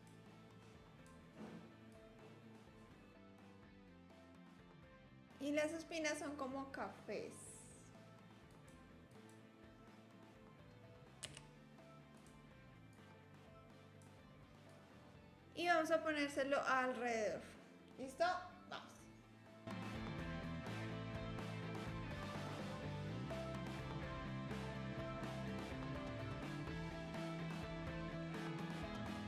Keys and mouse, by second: 0.4 click, 2.0-3.1 drag, 3.1 s, 3.4 click, 3.7 click, 4.1 Tab, 4.2 click, 4.4 3, 4.7 s, 7.2-8.5 middle drag, 8.5 click, 9.3 middle click, 9.6 shift+d, 13.0-14.0 drag, 14.7 click, 19.7 shift+d, 20.6 click, 20.8 r, 21.8 click, 22.7 shift+d, 23.2 r, 24.4 click, 25.5 r, 26.0 KP_3, 27.7 r, 28.1 click.